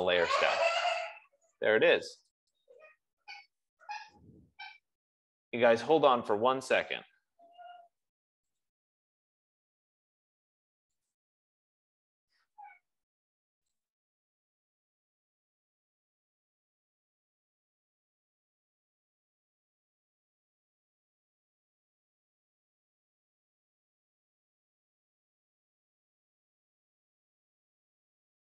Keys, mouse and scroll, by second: 0.2 click, 2.6 click.